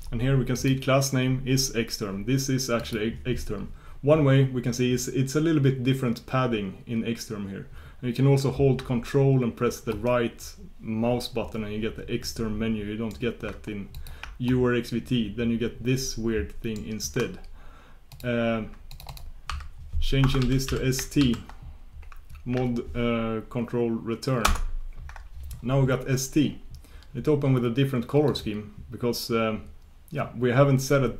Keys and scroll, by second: 24.4 ctrl+super+Return, 25.6 ctrl+super+Return, 28.3 ctrl+super+Return.